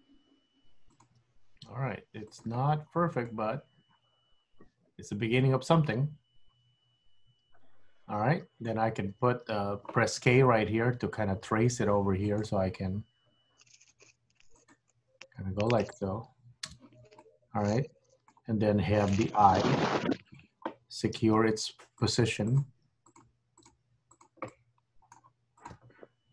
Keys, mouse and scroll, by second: 1.0 click, 1.1 g, 2.8 scroll up 2, 3.0 scroll down 5, 3.4 middle click, 8.9-9.3 scroll up 1, 10.2 k, 17.3 middle click, 19.5 KP_1, 20.3 click, 21.3 g, 22.6 click, 22.7 g, 23.7 click, 23.9 g, 24.6 middle click, 25.7 click.